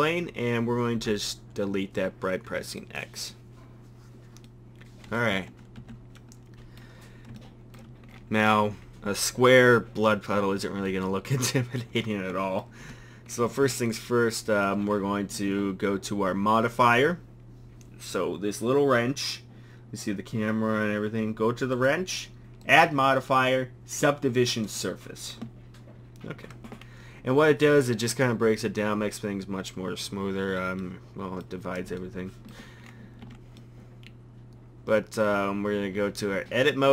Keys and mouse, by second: 1.0 x, 5.3 Tab, 5.8 a, 21.8-24.6 drag, 30.8-31.4 drag, 33.2 Tab, 35.8 Tab, 36.4 Tab.